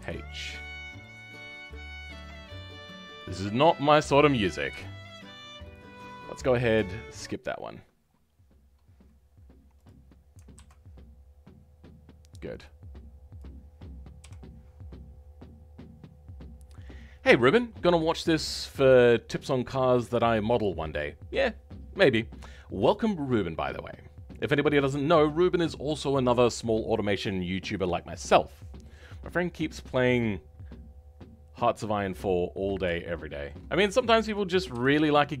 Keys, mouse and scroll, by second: 0.2-2.1 scroll up 3, 2.1 click, 3.1 shift+click, 3.5 shift+click, 3.9 shift+click, 5.4 m, 10.5 alt+h, 13.3 click, 14.2 KP_7, 14.8-15.4 scroll down 10, 32.2 scroll up 2, 33.0 shift+middle click, 33.6-33.9 scroll up 2, 33.9-35.4 shift+middle drag.